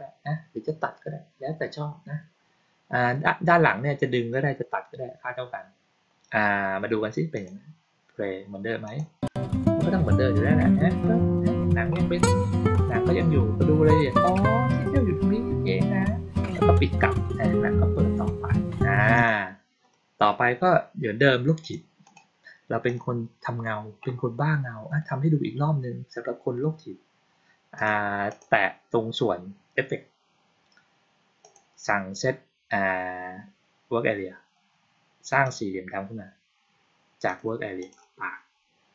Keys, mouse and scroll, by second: 7.2 click, 8.7 click, 19.0 click, 21.5 click, 21.9 right click, 22.8 click, 27.6 click, 28.2 click, 31.3 click, 35.3 click, 37.2 click, 37.7 click.